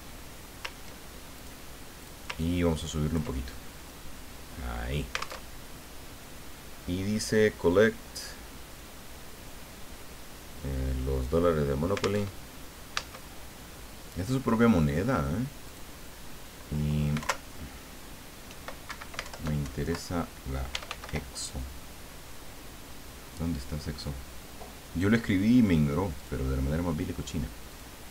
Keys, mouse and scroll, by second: 1.5 click, 2.0 click, 2.4-3.4 ctrl+drag, 3.5 ctrl+middle click, 4.1-5.4 drag, 5.5 alt+Tab, 12.2 alt+Tab, 13.8 Caps_Lock, 14.2 click, 15.6 click, 17.2 alt+Down, 18.8 alt+Escape, 19.2 alt+Down, 20.5-21.5 typing, 24.2-25.0 scroll down 2, 25.1 scroll down 2, 26.1 click, 27.7 click.